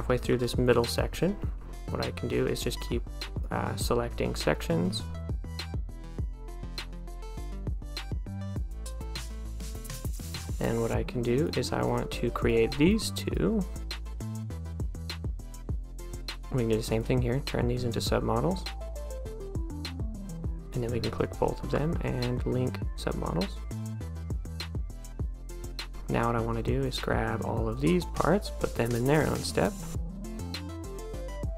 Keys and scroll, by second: 0.0 a, 24.6 d, 24.9 a.